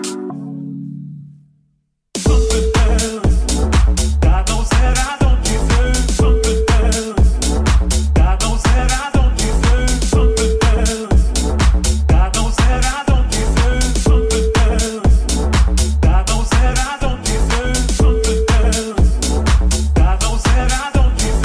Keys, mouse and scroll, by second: 1.7-16.9 shift+middle drag, 19.1 shift+click, 19.2-20.7 shift+middle drag, 20.8 middle click, 21.2 click, 21.2 right click.